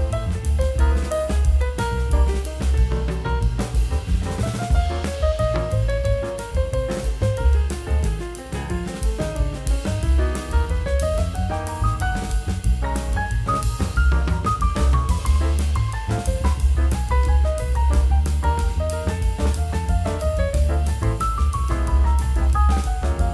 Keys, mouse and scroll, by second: 18.8 m, 22.6-22.9 scroll down 2, 22.6 middle click.